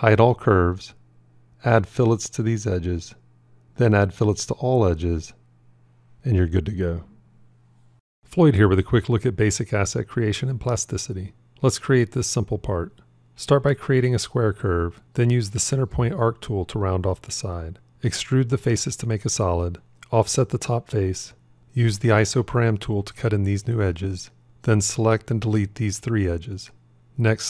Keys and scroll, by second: 4.2 ctrl+2, 20.2 o, 22.1 ctrl+r.